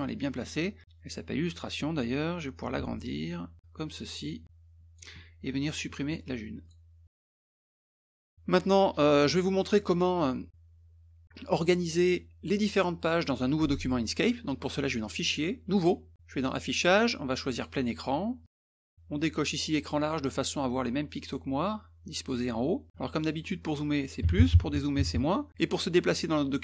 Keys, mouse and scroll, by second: 2.6 ctrl+shift+click, 3.6 click, 4.4 ctrl+shift+click, 5.6 click, 6.6 click, 7.0 middle click, 7.4 click, 7.8 ctrl+shift+click, 8.5 middle click, 9.8 middle click, 15.0 click, 15.7 click, 16.5 click, 17.6 click, 18.4 click, 20.0 click.